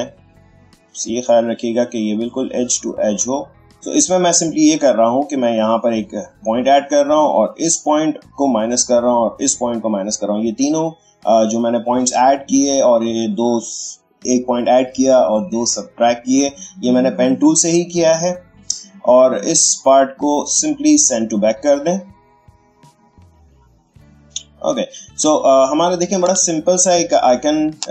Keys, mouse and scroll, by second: 5.6-7.5 drag, 18.1 click, 20.0 right click, 22.9 click, 25.2 space, 25.4 click, 26.1 ctrl+space, 26.4-27.9 ctrl+drag.